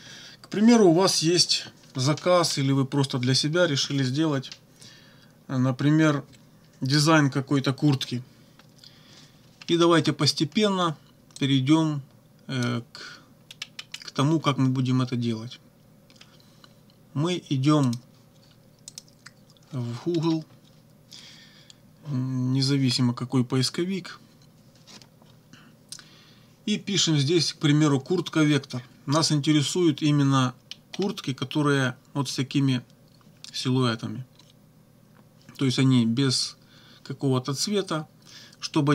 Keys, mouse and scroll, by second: 9.7 scroll up 2, 10.3 scroll up 2, 11.4-12.8 drag, 13.6-14.1 scroll down 2, 17.9 click, 18.9 click, 20.1-20.5 scroll up 1, 30.7 scroll down 1.